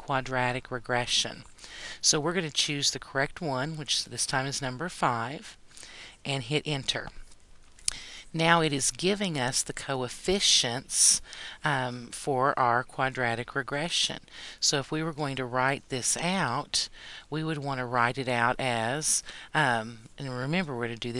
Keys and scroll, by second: 4.1 5, 6.5 Return.